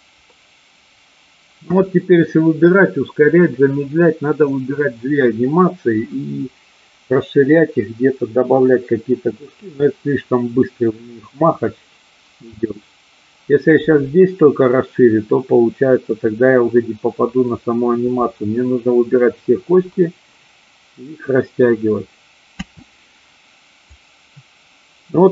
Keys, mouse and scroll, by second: 22.6 space, 23.9-25.3 drag.